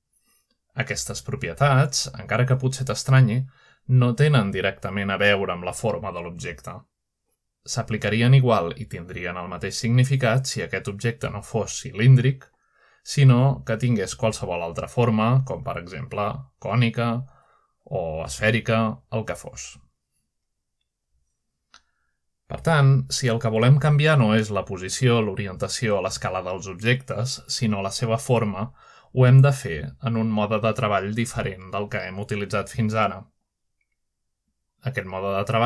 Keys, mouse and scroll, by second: 0.0 n, 0.9 g, 1.5 right click, 2.6 click, 3.2 typing, 3.9 click, 4.6 click, 4.6 typing, 5.3-6.3 drag, 6.8 typing, 7.6-8.5 shift+drag, 8.4-9.2 shift+middle drag, 9.6-10.3 middle drag, 9.7-10.5 scroll down 1, 10.5-10.9 shift+scroll up 4, 10.7-11.2 middle drag, 11.2 scroll down 2, 11.9-13.1 shift+middle drag, 13.4-14.7 drag, 14.7 typing, 15.5 click, 17.7-18.6 drag, 18.6-20.4 typing, 19.1 click, 20.0 click, 21.3-22.2 drag, 23.3-23.7 middle drag, 24.1 shift+middle click, 25.0-25.5 middle drag, 28.0-28.8 shift+middle drag.